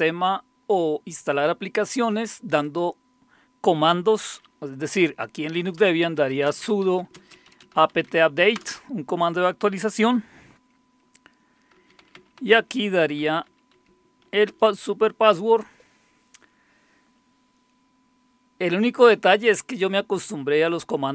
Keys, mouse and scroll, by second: 2.6 click, 3.1 click, 5.6-8.6 typing, 8.6 Return, 11.6-14.3 typing, 14.5 Return.